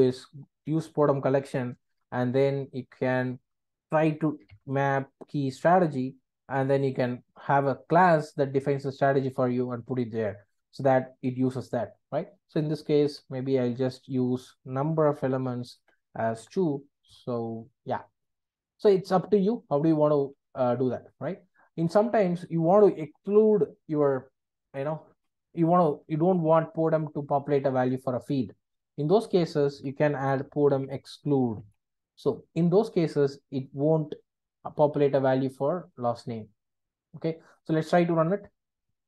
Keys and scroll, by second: 0.7 Return, 6.0 Return, 15.7 Return, 32.2 Return.